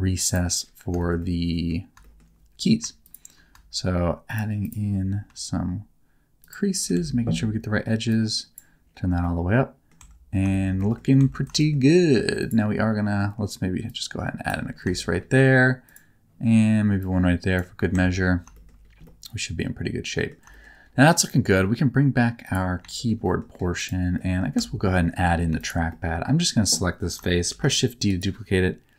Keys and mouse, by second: 0.2 click, 0.9 middle click, 1.1 middle click, 2.0 middle click, 3.0 shift+click, 6.4 shift+click, 6.9 alt+z, 8.1 click, 9.2 middle click, 10.4 shift+Tab, 10.5 middle click, 10.8 middle click, 11.1 Tab, 11.5 middle click, 13.9 click, 14.9 shift+middle click, 15.8 click, 16.9 click, 17.9 Tab, 18.5 shift+middle click, 19.0-20.2 middle drag, 20.4 shift+middle click, 22.4 click, 22.9 shift+middle click, 23.2 middle click, 24.1 middle click, 24.5 Tab, 25.4 3, 25.5 click, 25.9 middle click, 27.5 shift+d, 28.0 click.